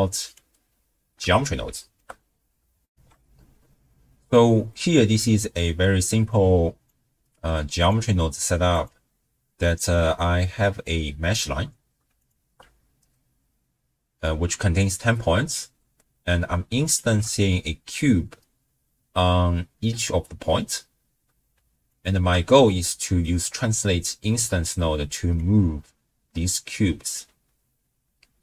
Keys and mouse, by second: 1.3-2.0 shift+middle drag, 2.9 ctrl+alt+shift+w, 3.1 ctrl+alt+shift+q, 4.8 click, 6.3 click, 7.8-8.9 drag, 10.9 click, 12.2 alt+shift+click, 16.9 alt+shift+click, 21.9 alt+shift+click, 22.8 middle click, 25.4-28.4 drag.